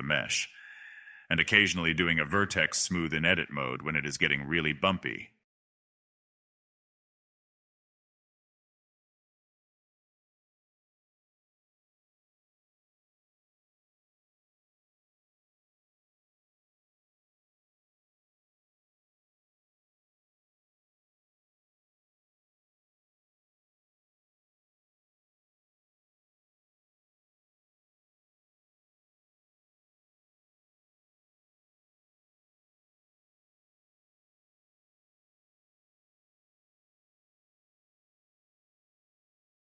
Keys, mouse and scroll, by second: 0.8 click, 1.1 middle click, 1.7 click, 2.0 middle click, 2.5 click, 2.9 middle click, 3.1 click, 3.4 middle click, 3.9-5.6 drag, 5.6 ctrl+z, 5.7-7.1 drag, 7.1 middle click, 7.6 scroll down 1, 7.8 click, 8.1 middle click, 8.8 click, 9.4 middle click, 9.6 click, 10.9 middle click, 11.2 middle click, 11.3 scroll up 3, 11.4 middle click, 11.6 scroll down 1, 11.7 middle click, 12.8 scroll up 1, 13.0 click, 13.1 middle click, 13.2 click, 13.5 middle click, 13.6 click, 13.8 middle click, 13.9 click, 14.0 middle click, 14.1 click, 14.3 middle click, 14.3 click, 14.6 middle click, 14.7 click, 14.9 middle click, 15.0 click, 15.3 middle click, 15.3 scroll up 1, 15.4 middle click, 15.5 click, 15.6 middle click, 15.7 click, 16.0 middle click, 16.1 click, 16.5 middle click, 16.6 click, 17.3 middle click, 17.4 click, 17.7 middle click, 17.9 click, 18.0 middle click, 18.2 click, 18.4 a, 18.5 scroll down 1, 18.5-18.9 middle drag, 18.9 click, 19.7 click, 20.1 middle click, 21.8 click, 23.0-23.3 drag, 23.3 s, 23.8 click, 24.0 s, 24.6 middle click, 25.5 scroll down 2, 25.6 click, 25.6 middle click, 25.8 middle click, 26.9 scroll up 1, 27.0 middle click, 27.7 click, 27.9 middle click, 28.6 scroll up 1, 28.7 shift+middle click, 29.5 click, 30.4 middle click, 31.3 click, 31.7 middle click, 32.1 click, 32.3 middle click, 32.4 scroll down 2, 32.4-33.4 middle drag, 34.0 shift+middle click, 34.0-34.4 scroll up 2, 34.4 click, 35.4 middle click, 35.9 scroll up 1, 36.0 click, 36.1 middle click, 36.2 click, 36.3 middle click, 37.3 click, 37.4 middle click, 37.7 click, 38.4 middle click, 38.6 scroll down 2, 38.8 click, 39.0 middle drag, 39.1 click, 39.1 middle click, 39.7 click.